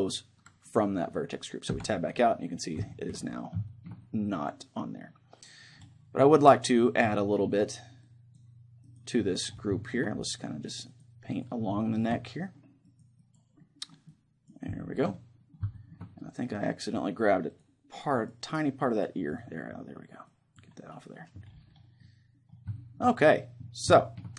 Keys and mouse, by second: 1.8 Tab, 2.2-5.8 middle drag, 7.2-9.8 drag, 9.8-11.8 middle drag, 10.4-15.8 drag, 11.8-17.6 middle drag, 16.0 click, 18.3-22.8 drag, 22.0-24.3 middle drag.